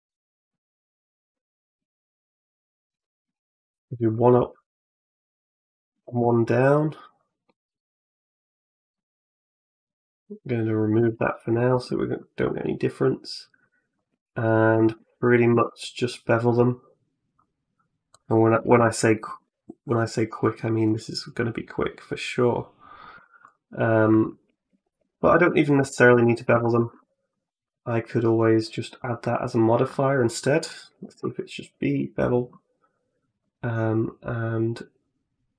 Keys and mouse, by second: 1.6 2, 1.8 click, 2.7 g, 5.1 click, 7.3-8.8 middle drag, 9.5 right click, 9.7 x, 10.8 a, 10.9 a, 11.3-13.4 middle drag, 13.8 click, 14.3 shift+right click, 15.3 ctrl+b, 18.4 a, 18.6 a, 19.2 Tab, 19.8 middle click, 23.3 right click, 24.0 middle click, 24.8 ctrl+z, 25.6 ctrl+z, 25.9 ctrl+z, 26.3 ctrl+z, 26.7 Tab, 29.1-31.3 drag, 33.3-35.5 drag.